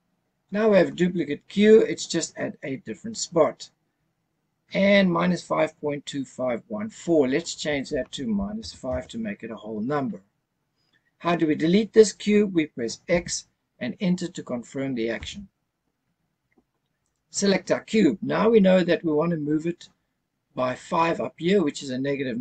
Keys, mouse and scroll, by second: 7.4-8.9 drag, 13.1 x, 17.0 click.